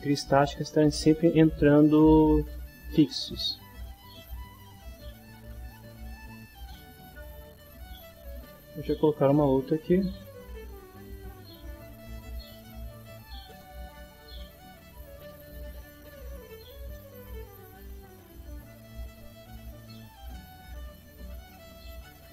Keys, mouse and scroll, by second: 4.0-5.2 middle drag, 5.7 middle click, 7.3 click, 8.9 right click, 13.6 click, 14.9 click, 16.5 click, 17.8-19.3 drag, 20.2-21.8 drag.